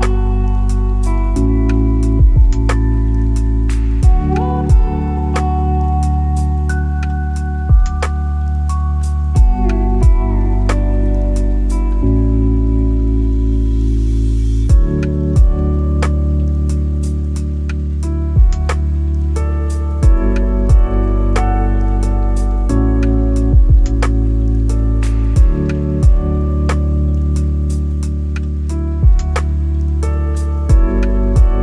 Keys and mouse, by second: 0.0 n, 0.8-1.2 shift+middle drag, 2.3 click, 4.1-10.3 drag, 10.9 Tab, 12.3 a, 12.8 s, 15.0 alt+z, 16.3 s, 18.9 shift+click, 21.3 click, 23.1 s, 23.3 z, 26.3 click, 27.0 middle click, 28.3 shift+click, 28.8 shift+click, 29.5 shift+click, 30.4 click.